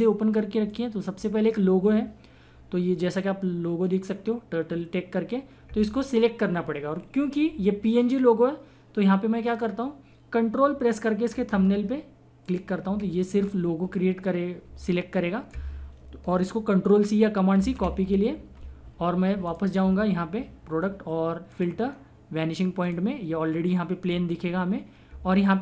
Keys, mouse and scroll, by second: 0.7 click, 12.4 ctrl+click, 16.0 ctrl+click, 17.5 ctrl+c, 19.4 click.